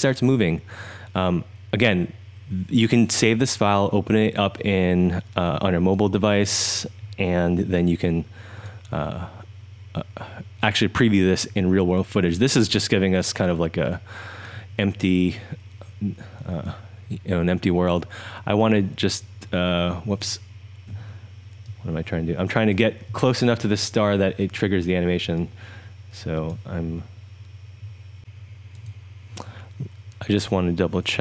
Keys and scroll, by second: 7.3-8.5 typing, 11.2-14.5 typing, 18.5-20.0 1, 20.9 2, 28.2 Up.